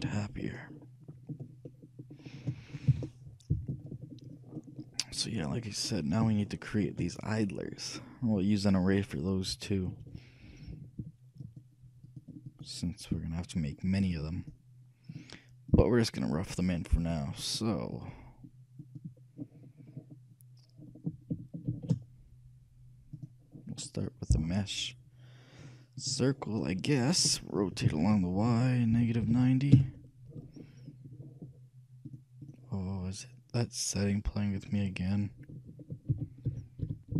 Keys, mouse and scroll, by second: 0.3-3.5 shift+middle drag, 3.0 shift+z, 4.5 middle click, 5.6-6.0 scroll up 1, 6.0-6.6 scroll down 1, 6.6-8.1 shift+middle drag, 11.5-20.6 drag, 20.8-23.0 middle drag, 21.9 shift+a, 28.0 r, 30.7-32.7 middle drag, 32.2-34.2 drag, 34.7-36.4 drag, 36.2 r.